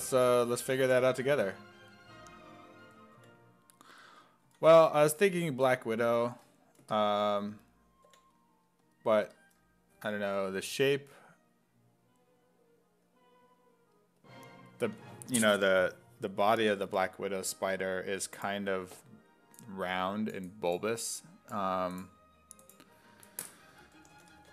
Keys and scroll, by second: 0.0-1.4 typing, 2.9 s, 3.2 5, 4.5 s, 4.7 5, 8.1 5, 23.5-24.5 typing.